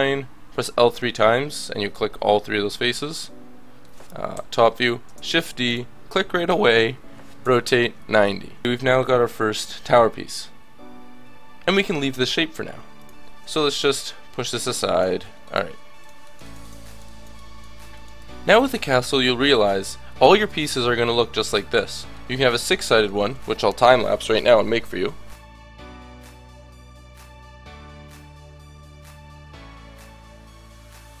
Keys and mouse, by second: 4.3 KP_7, 5.1 shift+d, 7.4 r, 8.6 Tab, 12.3 KP_1, 15.3-19.2 drag, 19.2-21.5 middle drag, 25.3-31.2 typing, 25.6 Tab, 26.1 Tab, 26.1 Tab, 30.9 Tab.